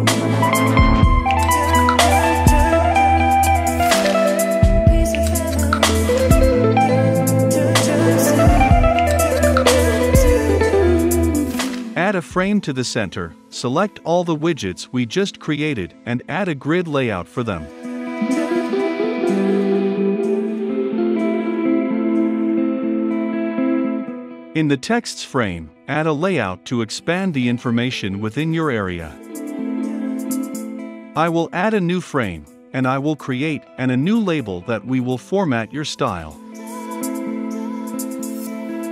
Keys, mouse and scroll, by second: 1.0-3.4 middle drag, 3.4-6.0 drag, 6.4 ctrl+c, 6.6 ctrl+v, 8.5 ctrl+c, 8.6 ctrl+v, 10.7 ctrl+x, 12.5-13.6 typing, 13.9 right click, 16.6 ctrl+right click, 16.7-18.2 ctrl+drag, 18.9 right click, 22.7 click, 25.4 right click, 33.3 ctrl+v, 34.1 right click, 36.5 click, 38.0-38.9 right drag.